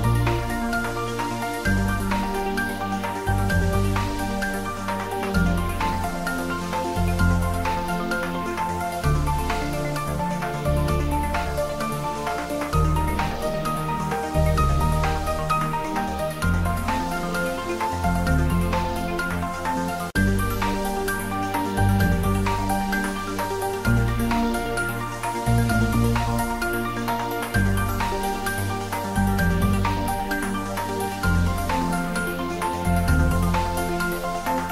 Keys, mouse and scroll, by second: 0.9 e, 2.4 click, 2.9-4.4 ctrl+middle drag, 4.4 shift+middle click, 5.2-7.0 ctrl+middle drag, 7.0 Tab, 7.5 middle click, 8.5 click, 9.7-10.7 typing, 15.1 click, 15.2-16.2 typing, 17.7 click, 18.1 ctrl+s, 19.2 click, 20.5 shift+right click, 20.9 shift+a, 25.0 click, 25.7 s, 26.6 click, 26.9 g, 27.5 click, 28.3 shift+z, 29.4 s, 30.6 click, 30.8 shift+z, 33.0 shift+right click, 34.1 g.